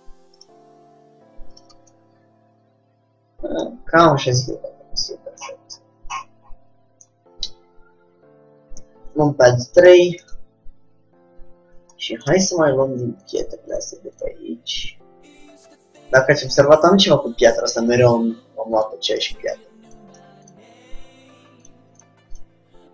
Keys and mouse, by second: 0.6 g, 1.8 Tab, 2.5 middle click, 4.3 middle click, 5.9-8.9 middle drag, 8.9 KP_3, 12.1 middle click, 13.4-16.0 drag, 18.8 a, 19.0 a, 20.1-22.9 drag, 20.1 a.